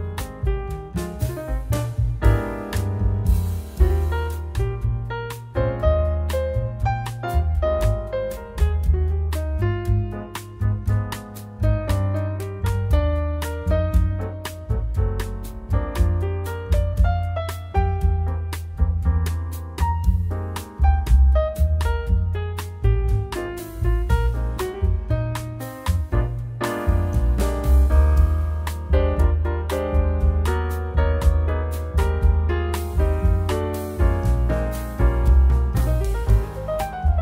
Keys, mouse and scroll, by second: 1.1 click, 2.7 click, 3.6 middle click, 4.6 click, 5.8 shift+a, 10.3 click, 11.1 click, 13.9 click, 18.0-18.3 scroll down 4, 18.4 middle click, 19.9 middle click, 19.9-21.4 scroll down 2, 22.6 click, 23.3 Delete, 23.3 click, 23.7 Delete, 25.0 click, 28.4 click, 31.0 click, 34.0 middle click, 35.1-36.0 scroll up 5, 36.0 scroll down 1.